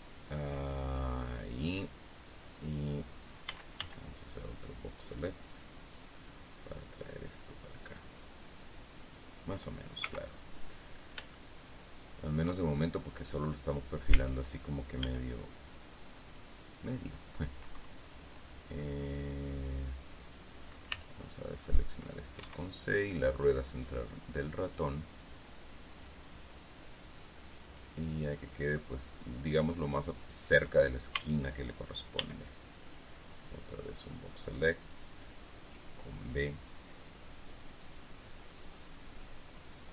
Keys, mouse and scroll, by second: 4.0 a, 4.9-5.9 drag, 6.5-10.2 middle drag, 10.6 z, 11.9 shift+middle click, 12.4-13.2 shift+scroll up 2, 13.2-13.5 shift+scroll up 1, 14.7 a, 15.6 b, 16.2 click, 21.5 c, 22.2 middle click, 23.0 Escape, 24.4-25.5 drag, 26.6-28.5 drag, 29.8-30.8 drag, 31.7 a, 32.7 b, 33.0-34.3 drag.